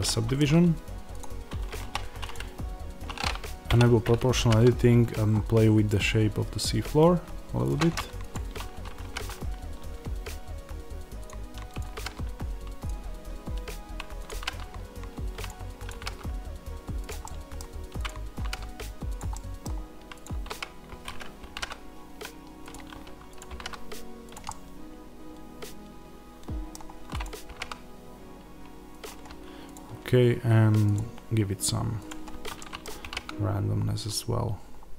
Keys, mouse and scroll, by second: 1.1 click, 1.7 1, 2.2 click, 3.5 o, 7.6 click, 8.9 g, 11.2 click, 11.8 g, 12.8 click, 14.2 g, 15.4 click, 15.8 g, 17.0 click, 17.1 middle click, 17.9 click, 18.3 g, 19.1 click, 19.2 middle click, 20.1 click, 20.2 z, 22.6 click, 23.4 g, 24.2 click, 24.3-27.1 middle drag, 27.1 click, 27.4 g, 29.6 click, 32.5-34.9 middle drag, 32.9 g.